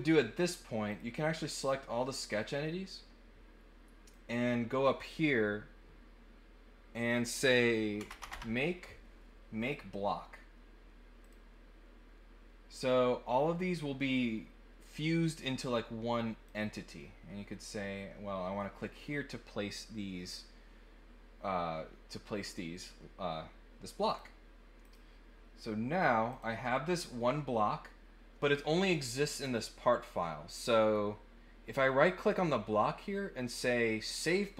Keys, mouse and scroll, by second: 0.8 click, 1.1 click, 4.1 click, 9.6 click, 11.2 click, 15.3-16.4 drag, 24.0 click, 24.8 click, 26.3 click, 30.8 right click, 34.1 click.